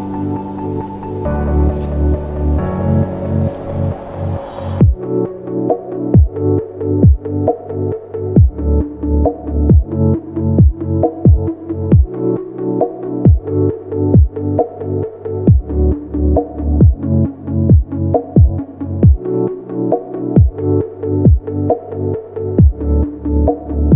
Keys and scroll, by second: 11.8 space, 14.3 space, 15.9 space, 19.0 space, 22.0 ctrl+g, 22.7 space.